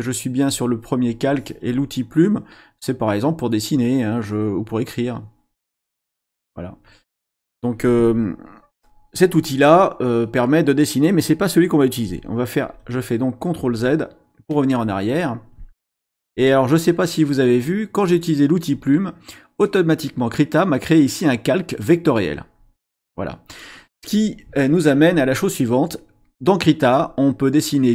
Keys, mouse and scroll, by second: 0.4 click, 1.0 click, 3.7 click, 5.9 click, 12.6 ctrl+z, 13.6 ctrl+z, 22.6 click.